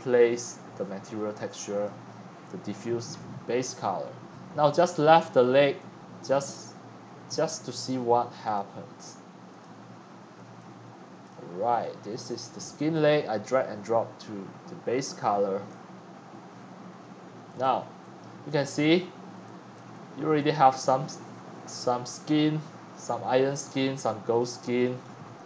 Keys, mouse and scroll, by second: 2.3-2.7 drag, 4.5-5.6 scroll up 4, 5.6-6.3 x, 6.5 x, 6.5 scroll up 6, 6.8-8.5 scroll down 6, 8.5-9.4 drag, 9.8-17.8 drag, 17.8-18.3 scroll down 7, 18.3-19.3 scroll up 16, 18.6 right click, 19.8 click, 19.9 right click, 20.3-20.8 scroll down 13, 20.8-21.1 scroll up 4, 21.6 scroll up 2, 22.8 scroll up 6, 22.9-23.6 scroll down 8, 24.0 c, 24.4-25.4 scroll up 9.